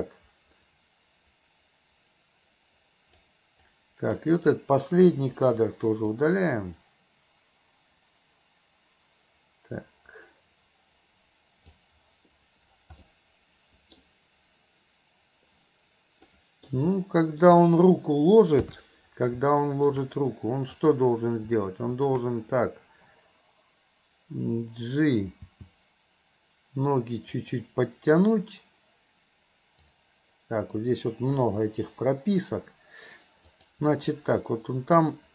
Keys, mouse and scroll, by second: 3.6-4.2 drag, 5.3 Delete, 6.2-11.9 drag, 13.0-14.0 middle drag, 16.4 middle click, 17.0-17.4 middle drag, 19.5 middle click, 20.8 click, 25.5 g, 29.8-30.8 drag, 31.5 Delete, 33.6 click, 34.2-35.3 drag.